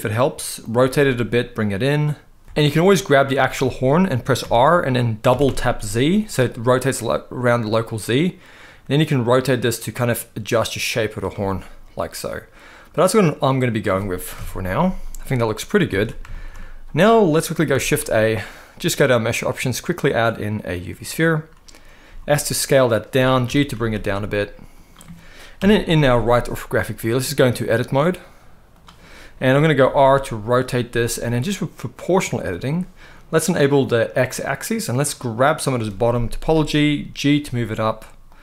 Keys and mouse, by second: 0.3 click, 0.6 g, 2.4 alt+a, 2.4 z, 2.5 middle click, 3.1 click, 3.4 middle click, 4.1 r, 5.0 z, 5.2 z, 10.9 click, 11.2-13.4 middle drag, 14.1 KP_1, 15.6 alt+a, 16.0 shift+middle drag, 17.4 shift+a, 21.8 s, 23.0 click, 23.1 g, 23.4 z, 24.4 click, 25.3 KP_3, 26.8 click, 27.4-28.5 drag, 29.5 r, 31.8 click, 33.8 click, 34.9 click, 36.3 g, 38.0 click.